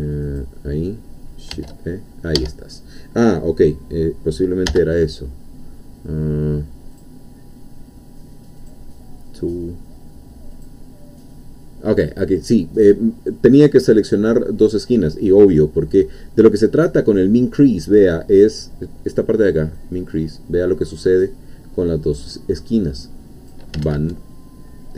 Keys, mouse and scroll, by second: 0.4-1.5 shift+drag, 1.5 shift+e, 2.4 Escape, 4.7 n, 6.9 click, 8.6-10.8 drag, 19.8-23.7 drag, 23.8 ctrl+z.